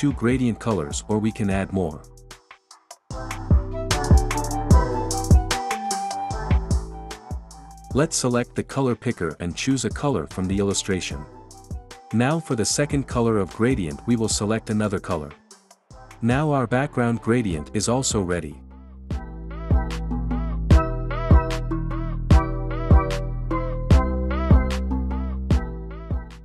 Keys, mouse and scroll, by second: 6.1 click, 8.2-9.2 drag, 10.9-11.9 drag, 12.8-13.8 drag, 15.1-16.1 drag, 17.0-18.0 drag, 19.5 click, 21.7 click.